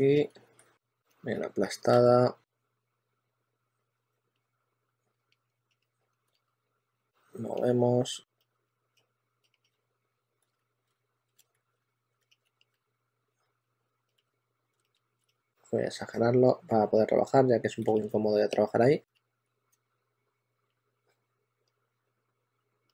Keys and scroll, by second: 0.5 e, 1.8 super+z, 5.0-7.3 typing, 8.6-15.2 typing, 18.7-19.6 typing.